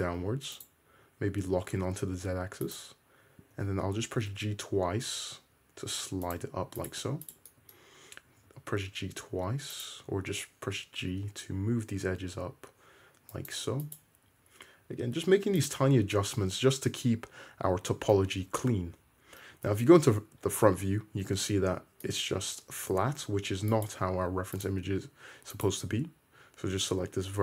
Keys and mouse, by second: 1.3 1, 2.7 click, 2.8-4.3 middle drag, 3.6 g, 6.8 click, 7.3 shift+click, 8.3 g, 10.1 g, 13.9 click, 14.0-22.0 middle drag, 14.3 g, 16.2 `, 19.6 `, 23.8 click, 24.6 click, 25.7 ctrl+click.